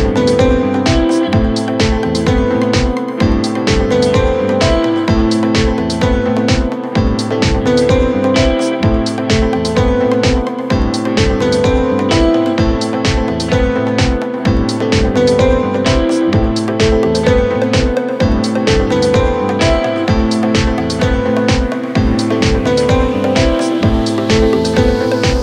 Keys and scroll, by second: 3.6 ctrl+z, 5.9 ctrl+z, 7.6 ctrl+z.